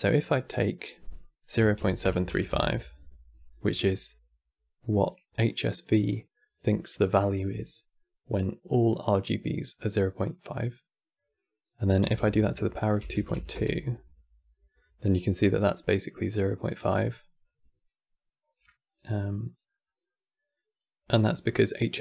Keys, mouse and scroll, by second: 0.2-3.2 drag, 11.9 KP_Multiply, 18.3-19.0 scroll up 7, 19.0 middle click, 19.5-20.2 scroll up 7.